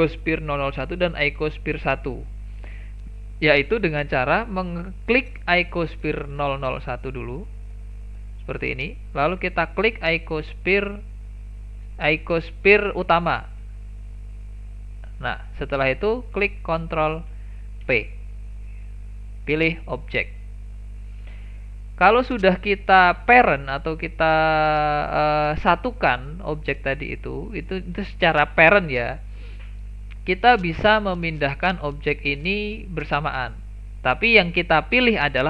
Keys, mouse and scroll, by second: 4.1 click, 7.4 click, 14.2 shift+click, 17.8 ctrl+p, 23.4 click, 31.2 click, 34.5 click.